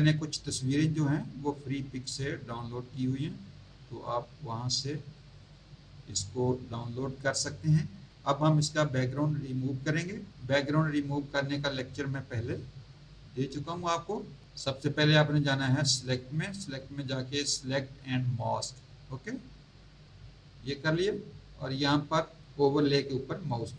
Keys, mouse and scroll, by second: 0.2 scroll down 1, 1.5 scroll down 1, 5.1 click, 16.0 click, 18.3 click, 21.3 scroll up 1, 23.4 click.